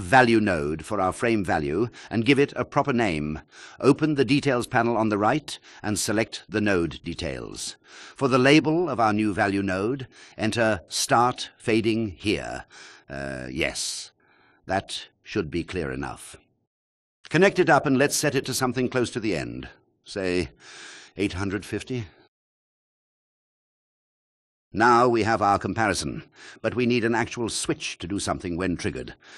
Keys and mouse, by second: 1.8-3.7 drag, 3.7 n, 5.5-12.1 drag, 18.2-20.3 drag, 28.2 shift+a.